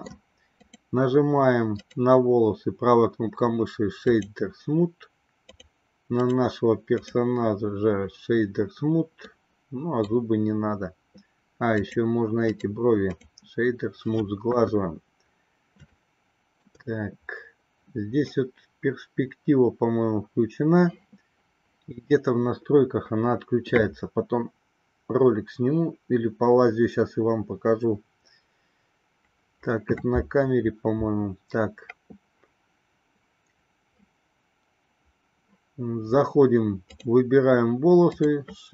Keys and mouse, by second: 0.9 click, 2.2-4.4 right drag, 6.6 right click, 9.4-10.5 middle drag, 11.9 click, 12.8 right click, 14.7 KP_1, 16.3-17.1 shift+middle drag.